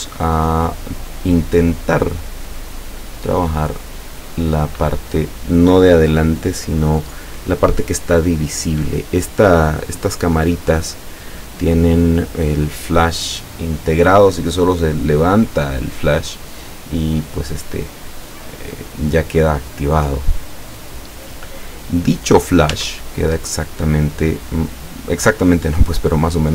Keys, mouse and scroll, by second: 19.1-21.0 drag, 22.8 Tab.